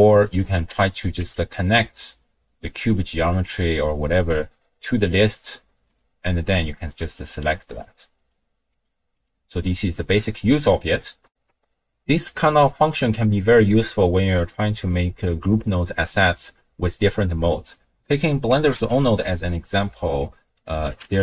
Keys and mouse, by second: 0.4 click, 1.2 n, 2.1-3.0 drag, 4.9-6.1 drag, 6.5 click, 6.9 n, 7.8 drag, 8.1 click, 8.7 n, 11.3 ctrl+alt+shift+w, 11.5 ctrl+alt+shift+q, 18.8 ctrl+a.